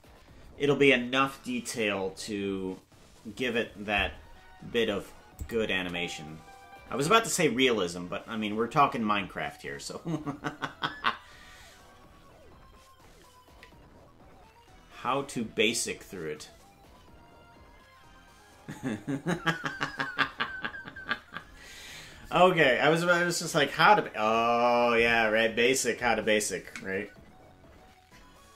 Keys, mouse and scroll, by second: 5.4 click, 5.7 space.